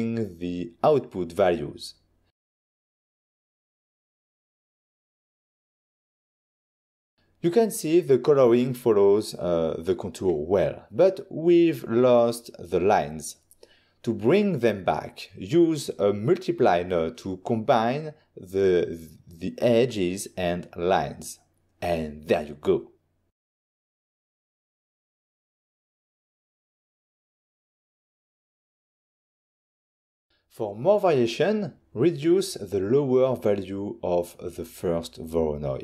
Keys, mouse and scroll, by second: 0.8 Return, 2.5 click, 3.8 click, 4.6 1, 4.9 Tab, 5.1 0, 5.3 Return, 7.0 ctrl+shift+click, 8.5 click, 10.0 click, 10.3 middle click, 10.6 ctrl+shift+click, 12.5 scroll down 1, 12.8 middle click, 13.2 middle click, 13.7 click, 14.4 click, 14.9 scroll down 1, 15.2 click, 15.4 click, 15.7 click, 16.1 middle click, 16.3 middle click, 16.4 scroll up 1, 16.7 click, 17.1 click, 17.6 shift+d, 18.6 click, 19.0 ctrl+middle click, 19.6 click, 21.0 click, 21.3 click, 21.7 ctrl+middle click, 22.7 click, 24.0 click, 26.1 ctrl+shift+click, 26.8 ctrl+shift+click, 27.4 ctrl+shift+click, 27.8 middle click, 28.1 middle click, 28.4 ctrl+shift+click, 29.9 ctrl+shift+click, 31.7 ctrl+middle click, 33.5 middle click, 34.1 middle click, 34.6 click.